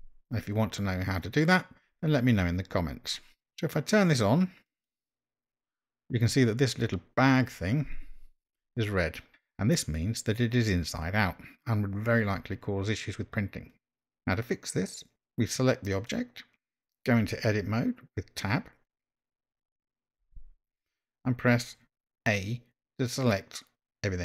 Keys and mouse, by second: 20.4 Tab.